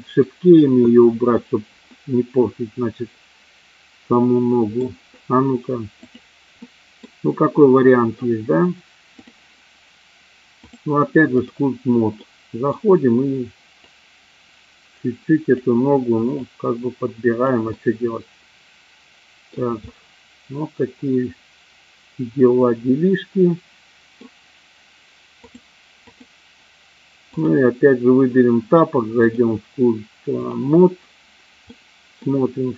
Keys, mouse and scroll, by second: 2.0-4.8 middle drag, 6.5-7.1 middle drag, 9.1 click, 10.5 click, 12.2 middle click, 13.8-15.9 drag, 16.5-17.8 drag, 17.8-19.5 middle drag, 19.9-24.1 middle drag, 25.3 click, 27.3 click, 29.2-30.6 drag, 31.6 middle click.